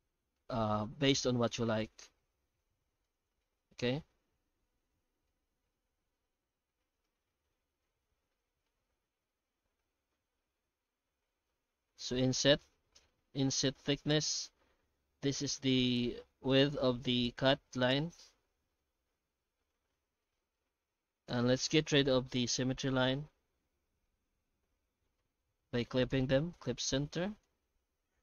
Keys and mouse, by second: 22.6 middle click, 24.0 F8, 24.7 F9.